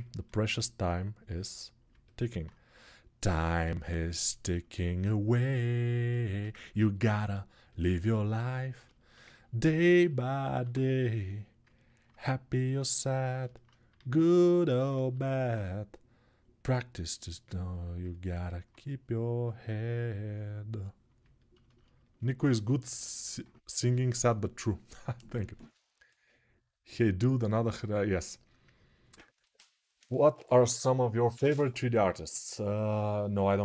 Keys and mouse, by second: 10.3 alt+q, 13.7 alt+q, 14.8 alt+q.